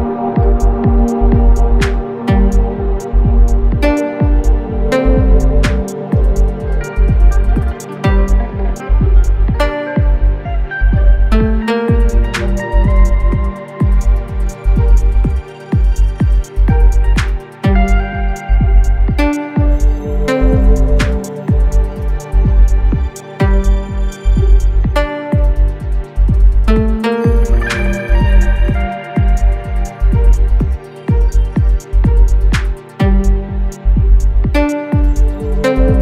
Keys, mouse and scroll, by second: 1.5 right click, 2.6 click, 7.7 click, 13.1 click, 23.2 click, 28.0-31.3 typing, 33.7 click.